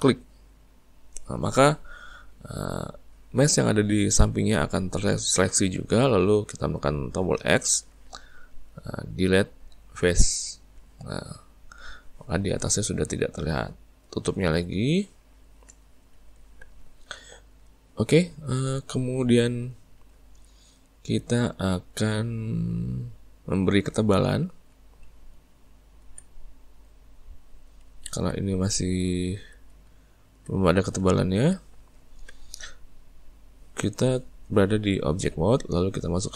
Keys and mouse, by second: 0.6 alt+shift+click, 7.4 x, 11.2 Tab, 11.5-22.7 middle drag, 24.1-25.0 ctrl+middle drag, 25.0 z, 26.6-28.9 middle drag, 28.9 `, 29.8 z, 31.1-34.1 ctrl+middle drag.